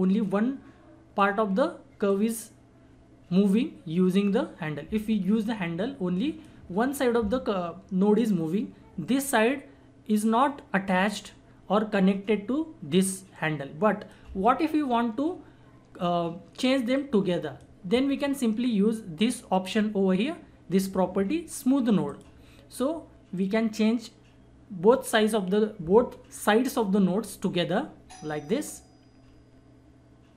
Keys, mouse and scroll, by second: 10.4-13.3 drag, 13.3-16.7 drag, 17.0-19.6 drag, 22.1-30.3 drag.